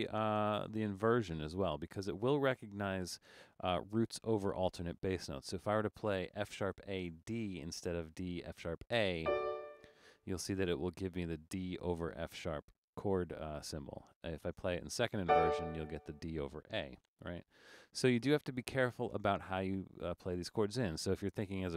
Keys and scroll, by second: 0.4 BackSpace, 17.1 BackSpace, 17.4 BackSpace, 18.0 BackSpace, 19.1 BackSpace.